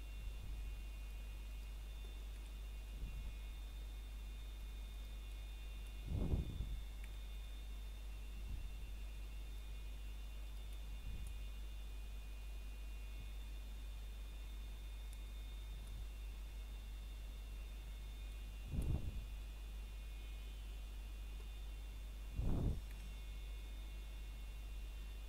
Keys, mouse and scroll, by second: 1.5 right click, 1.9 scroll down 1, 2.1 shift+middle click, 2.4 scroll up 1, 3.7 middle click, 4.1 scroll up 1, 5.6 middle click, 8.2 scroll down 1, 8.6 middle click, 9.3 scroll up 1, 13.6 c, 14.3 click, 17.9 right click, 18.3 scroll down 1, 18.6 middle click, 19.0 scroll up 1, 20.0 shift+middle click, 21.0 shift+click, 21.4 scroll down 1, 21.8 middle click, 23.1 scroll down 1, 23.5 middle click, 24.1-25.2 scroll up 1.